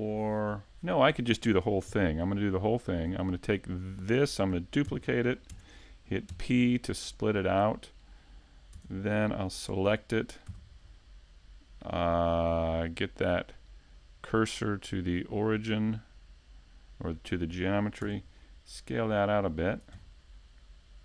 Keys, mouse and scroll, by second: 0.4 shift+middle click, 0.6 middle click, 1.1 shift+middle click, 2.0 right click, 6.6-8.4 scroll up 4, 6.9 middle click, 7.7 middle click, 10.2 middle click, 10.9 right click, 11.6 shift+right click, 12.3 middle click, 13.7 shift+s, 14.8 middle click, 16.3 click, 17.5 click, 20.0 s.